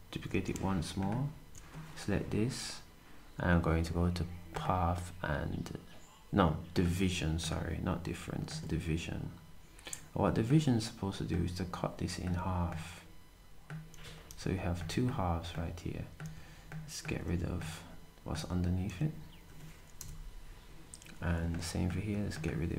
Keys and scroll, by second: 13.9 typing, 16.2-17.2 typing, 18.3-18.8 typing.